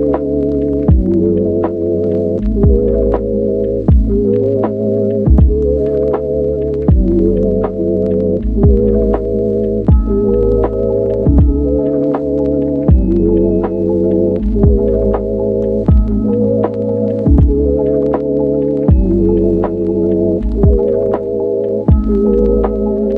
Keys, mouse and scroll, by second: 3.2-14.5 drag, 18.6 click, 19.6 click, 21.6 click.